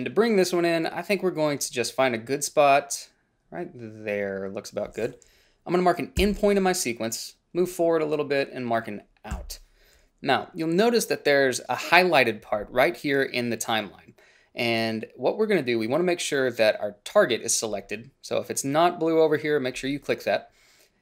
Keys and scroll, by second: 6.4 i, 9.5 o.